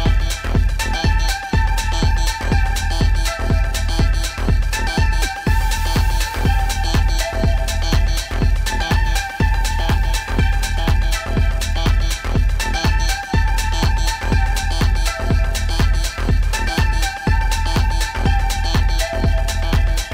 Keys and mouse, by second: 7.6-12.2 drag, 13.7 click, 14.6 ctrl+click, 15.0 ctrl+click, 16.2 p, 19.0 click.